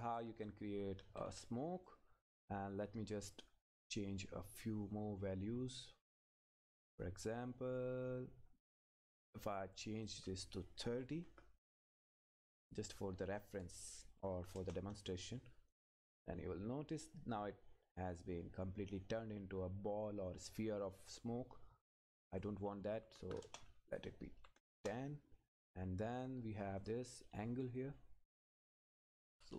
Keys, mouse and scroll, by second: 0.3 Left, 3.3-10.0 drag, 11.7 Return, 12.6 click, 14.6 Return, 15.7 click, 20.0 scroll up 1, 22.3 click, 23.4 Return, 24.0 click, 24.8 Return, 25.3-26.8 scroll up 1, 26.8 click, 27.9-28.6 scroll up 1.